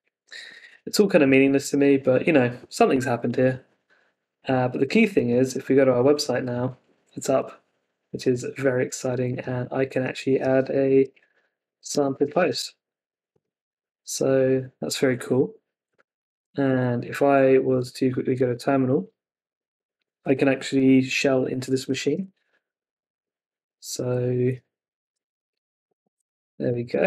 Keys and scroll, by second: 16.6 super+Tab, 22.1 Return.